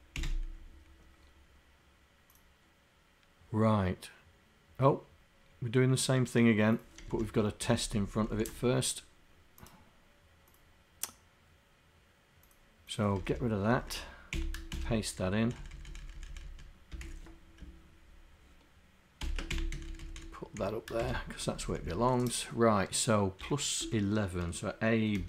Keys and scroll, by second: 7.7 shift+Down, 8.1 shift+Down, 13.2 Home, 13.8 shift+Down, 14.4 Delete, 15.5 Up, 16.1 Up, 16.5 Up, 17.1 Down, 19.8 Up, 20.1 Up, 21.0 shift+Insert, 23.4 End, 23.9 BackSpace.